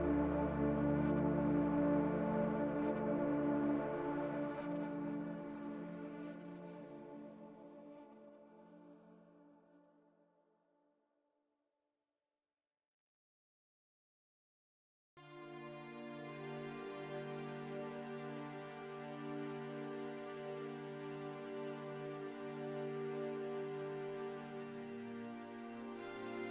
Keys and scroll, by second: 0.6 shift+s, 2.2-6.3 typing, 9.5-13.2 typing, 18.2-22.0 typing.